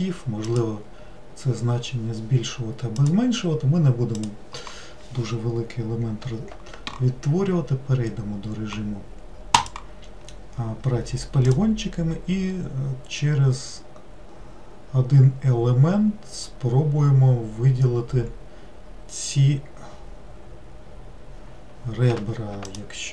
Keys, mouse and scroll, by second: 9.6-12.8 drag, 22.8 alt+click.